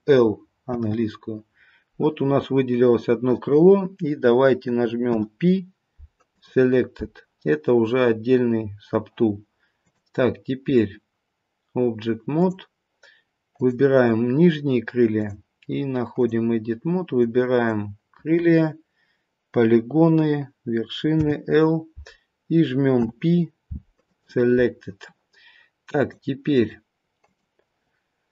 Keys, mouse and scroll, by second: 9.8 click, 13.5 click, 15.1 click, 26.0 click, 26.6 click.